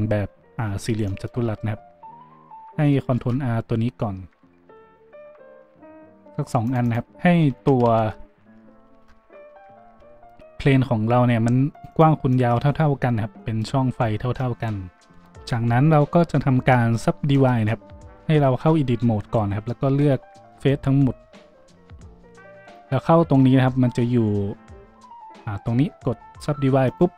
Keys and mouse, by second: 1.4 Tab, 3.1 ctrl+r, 6.9-15.1 middle drag, 7.5 ctrl+z, 7.8 ctrl+z, 9.2 Tab, 9.8 ctrl+r, 12.5 a, 15.1-27.1 drag, 18.5 Tab, 19.4 a, 19.8 a.